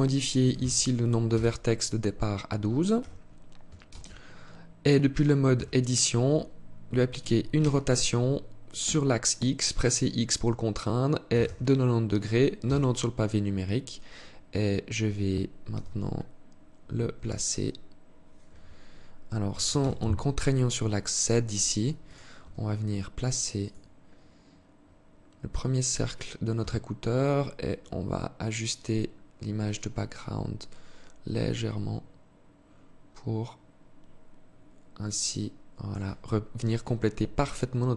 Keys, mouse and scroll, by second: 2.4 t, 3.3 ctrl+space, 4.9 Tab, 7.1 r, 12.9-14.5 scroll up 1, 14.5 scroll up 1, 15.1 g, 18.9 g, 21.8 s, 24.6 scroll up 1, 24.8-26.2 scroll down 1, 26.8-27.9 scroll down 8, 27.9-28.7 scroll down 2, 28.7 scroll down 3, 28.8 scroll up 1, 30.7 shift+click.